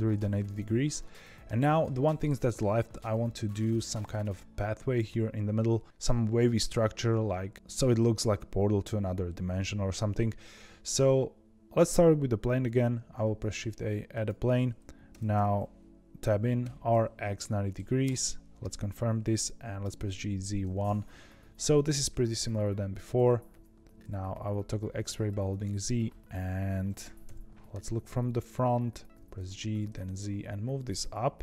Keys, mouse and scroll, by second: 0.9-3.9 middle drag, 12.9 shift+a, 15.0 Tab, 16.5 r, 19.9 g, 23.1 z, 25.2 click, 27.2 KP_1, 27.9 scroll up 2, 29.1 g.